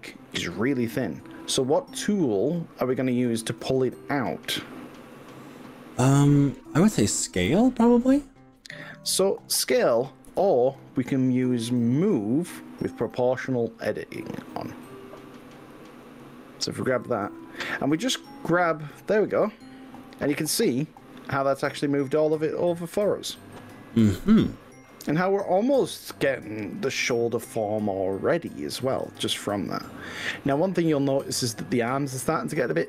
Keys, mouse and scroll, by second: 0.6 click, 0.8-4.3 middle drag, 4.3 click, 4.7 right click, 5.4 click, 6.0 right click, 7.5 middle click, 9.2 middle click, 10.3 KP_1, 11.6-12.8 drag, 15.8 click, 17.0 g, 24.0 click, 26.8 g, 29.2 click.